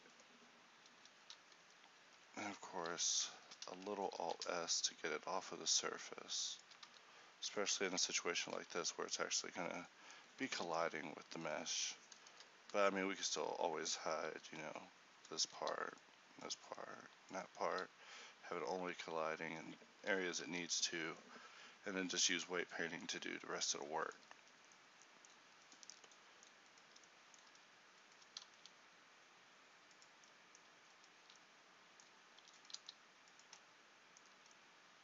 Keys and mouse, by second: 1.3 z, 1.6 a, 2.7 alt+s, 7.0 z, 7.8 Tab, 8.6 a, 11.8 right click, 14.4-20.5 d, 20.5 n, 24.0 click, 24.5 a, 26.0 Tab, 28.5 s, 32.5 e, 32.8 s.